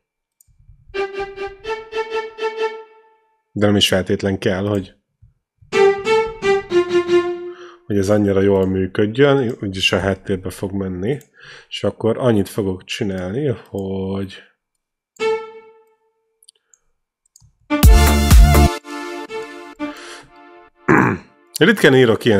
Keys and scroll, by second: 1.0-1.9 typing, 4.8-7.0 typing, 10.2 ctrl+l, 17.6 space.